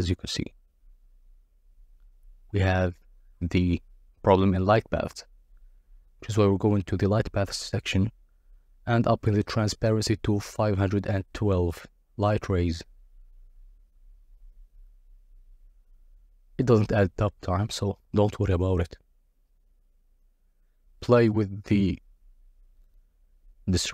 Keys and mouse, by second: 5.3 click, 6.4-8.7 drag, 16.6 click, 19.1 click, 23.5 click.